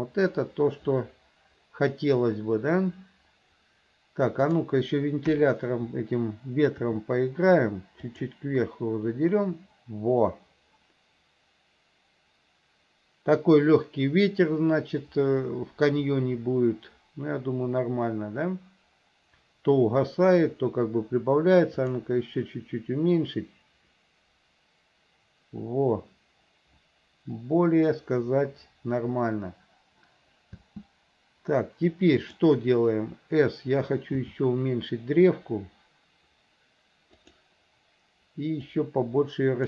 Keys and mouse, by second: 4.7 click, 5.4 KP_1, 7.0 r, 21.9 click, 30.7 space, 32.4 click, 34.4 s, 38.9-39.6 drag.